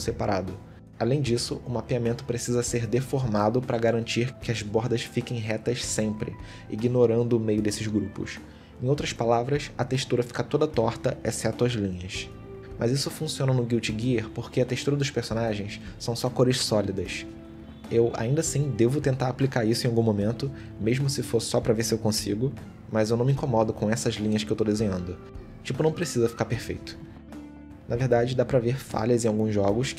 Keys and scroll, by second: 1.0 ctrl+z, 2.3 shift+x, 3.3 shift+x, 4.3 ctrl+z, 6.2 ctrl+z, 8.9 ctrl+z, 9.8 ctrl+z, 17.7 ctrl+z, 20.4 ctrl+z, 22.8 x, 24.3 shift+x, 25.0 shift+x, 26.1 shift+x, 27.8 ctrl+z, 28.6 shift+x, 29.3 shift+x.